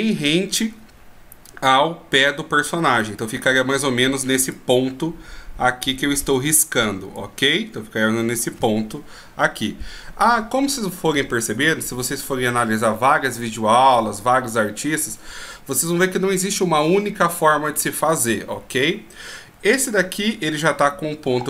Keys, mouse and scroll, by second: 4.5 d, 4.7 click, 6.8 d, 7.3 d, 7.3 right click, 8.6 d, 8.7 d.